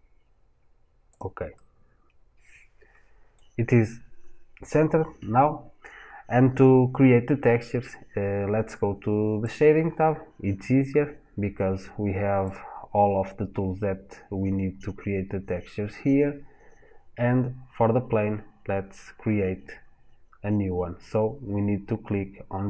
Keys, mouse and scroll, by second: 1.0 click, 1.3-4.3 middle drag, 9.3 click.